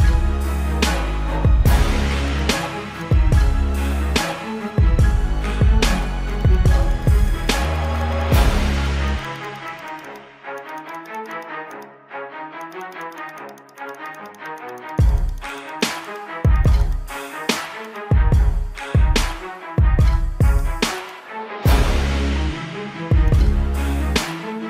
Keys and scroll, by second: 2.6 space, 5.5 ctrl+alt+z, 5.9 ctrl+alt+z, 8.0 ctrl+alt+z, 8.3 ctrl+alt+z, 13.4 space, 14.1 ctrl+alt+z, 16.5 ctrl+alt+z, 16.6 space, 17.3 space, 18.1 space, 19.5 space, 20.1 ctrl+alt+z, 20.4 ctrl+alt+z, 20.7 ctrl+-, 21.1 space, 21.5 ], 22.0 ctrl+alt+z, 23.4 ].